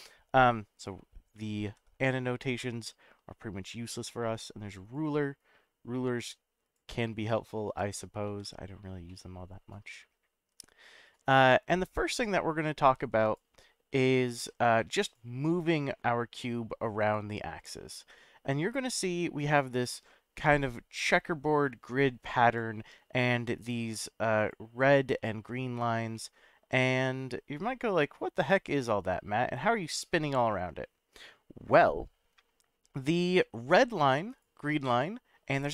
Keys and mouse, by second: 1.7 ctrl+z, 4.8 click, 5.4-6.8 drag, 7.3-7.8 middle drag, 8.2 ctrl+z, 9.1-10.1 middle drag, 12.1 click, 13.2 click, 15.0 click, 20.6-22.6 drag, 24.4 click, 25.2 drag, 26.1-32.5 middle drag, 33.2-33.8 middle drag, 34.3 click, 34.8 click.